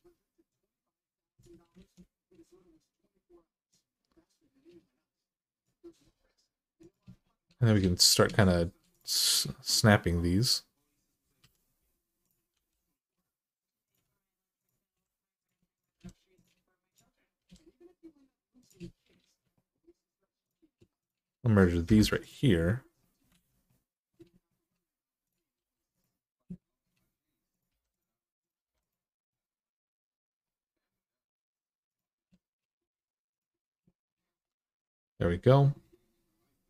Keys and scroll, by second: 1.6 alt+z, 7.6 alt+z, 11.2 1, 12.3 g, 14.7 g, 15.7 g, 19.0 alt+z, 21.6 m, 23.1 alt+z, 25.4 g, 27.5 g, 28.4 g, 32.6 g, 34.4 g.